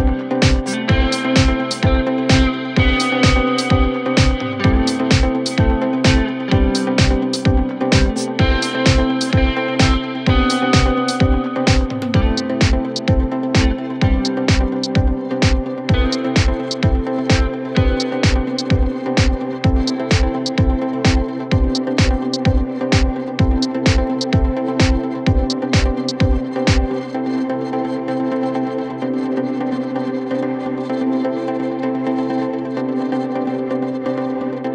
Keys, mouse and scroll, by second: 0.4 click, 0.7-3.5 typing, 4.4 scroll up 1, 4.5 middle click, 4.7 scroll down 3, 4.8 click, 4.9 middle click, 5.9-7.8 drag, 7.8 middle click, 8.2 click, 9.0 click, 9.9 scroll up 2, 10.0 middle click, 10.5-10.8 scroll down 3, 10.8-13.1 drag, 13.6 scroll up 1, 13.7 middle click, 14.1 click, 14.7 scroll up 4, 14.8 middle click, 15.0 middle click, 15.2 click, 15.3-16.1 scroll down 1, 16.3 scroll down 3, 17.2 click, 17.7 Tab, 18.1-18.7 drag, 18.7 Tab, 19.2 middle click, 19.5 KP_1, 19.7 KP_3, 20.0-20.5 scroll down 2, 20.5-22.0 drag, 22.5-23.8 shift+drag, 24.2-25.7 drag, 26.3 click, 27.3-27.9 scroll down 2, 28.3-29.3 drag, 30.8 s, 31.9 scroll up 2, 32.0 middle click, 32.3 middle click, 34.0 scroll up 1, 34.1 middle click, 34.3 KP_1, 34.5 KP_3.